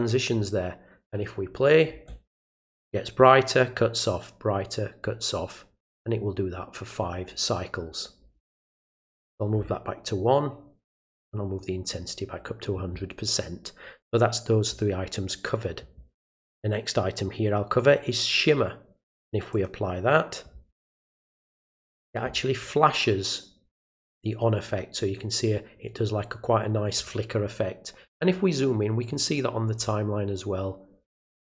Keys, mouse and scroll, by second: 1.1 click, 8.8 click, 11.0 click, 19.5 click, 21.4 click, 28.6 ctrl+middle click, 28.6 ctrl+scroll up 1, 29.1 ctrl+middle click.